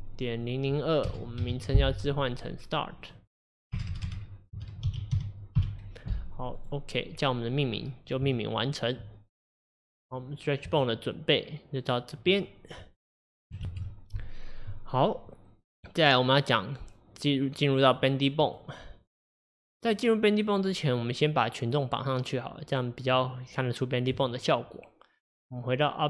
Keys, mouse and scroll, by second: 6.6 BackSpace, 8.3-13.7 shift+middle drag, 17.9 click, 18.5 click.